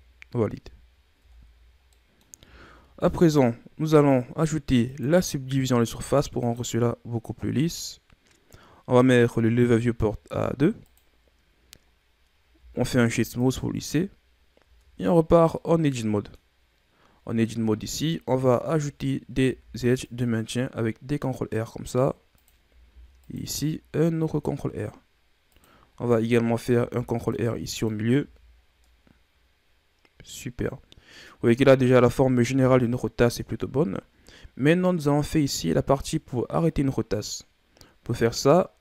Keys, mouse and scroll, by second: 0.5 z, 1.1 Tab, 1.6 scroll down 3, 1.9-2.4 middle drag, 2.4-3.1 shift+scroll down 3, 3.1-4.8 scroll up 1, 4.8-7.8 drag, 8.9-12.5 drag, 12.5 w, 14.6 Tab, 15.5 middle click, 16.4-17.4 scroll up 2, 17.4-19.3 shift+scroll up 6, 19.3 ctrl+r, 22.8 ctrl+r, 26.6 ctrl+r, 28.2 Tab, 28.5 scroll down 3, 28.8-31.9 middle drag, 32.5 KP_1, 34.7 ctrl+scroll down 5.